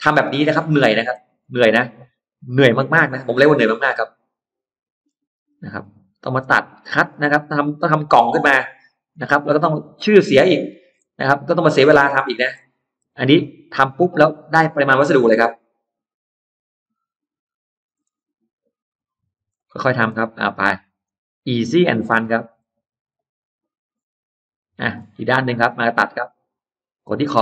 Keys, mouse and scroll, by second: 0.9-1.2 scroll down 2, 1.3-2.3 middle drag, 2.3 scroll down 2, 3.0 click, 4.0 click, 4.5 middle click, 5.1-5.9 scroll up 2, 6.7-7.1 scroll down 1, 7.9 click, 8.5 scroll up 1, 8.9 click, 9.3-9.6 scroll down 1, 9.8 scroll up 1, 10.5 click, 10.7-11.1 scroll down 1, 11.1 middle click, 11.7-12.4 scroll down 2, 12.1 middle click, 12.5-13.1 scroll up 1, 12.9 middle click, 13.8 click, 14.9 click, 15.4-15.7 scroll up 2, 16.7 click, 17.5 click, 17.8-18.1 scroll down 1, 18.1-18.5 scroll up 1, 18.8 click, 19.4 shift+middle click, 20.9 click, 21.3-22.1 scroll down 4, 22.3-23.4 scroll up 3, 23.5-24.7 middle drag, 24.7-25.0 scroll down 1, 25.5 click, 26.5 click.